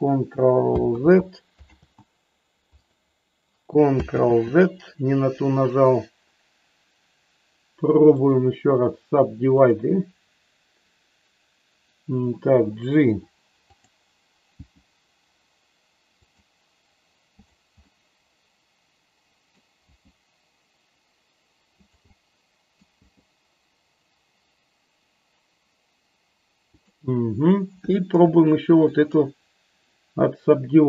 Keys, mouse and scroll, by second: 0.8 ctrl+z, 1.7 ctrl+z, 4.1 ctrl+z, 8.3-9.8 right drag, 13.7 click, 14.5 g, 16.1 click, 17.8-19.6 middle drag, 19.8 g, 21.7 click, 21.9 middle click, 26.8 click, 28.7 ctrl+click.